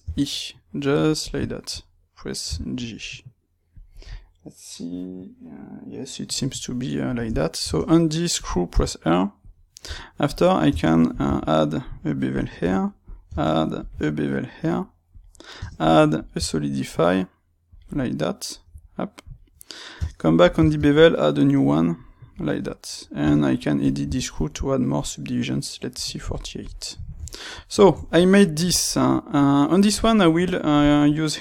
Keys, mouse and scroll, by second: 1.2 click, 1.4-3.8 shift+middle drag, 2.4 g, 3.8 click, 6.7-9.4 middle drag, 7.1 Tab, 7.6 space, 9.4 click, 9.8 Tab, 10.2 click, 10.6 space, 13.0-17.0 drag, 17.8-26.3 middle drag, 26.3 click, 26.5-29.3 middle drag, 29.3 click, 29.9-31.4 shift+middle drag.